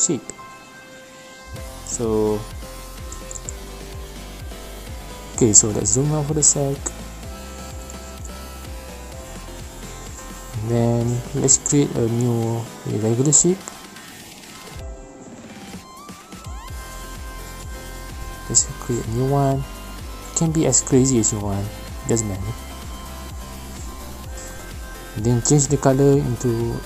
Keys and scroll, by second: 3.5 ctrl+z, 3.5 v, 9.5 p, 11.7 ctrl+z, 13.6 g, 26.3-26.8 typing.